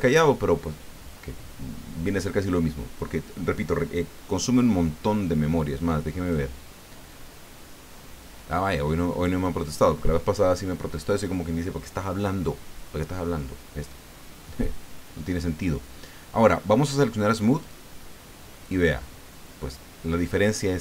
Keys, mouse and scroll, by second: 6.2 click, 7.5-8.5 scroll up 3, 8.5-8.8 scroll down 1, 9.6 click, 17.6 click, 18.5 middle click.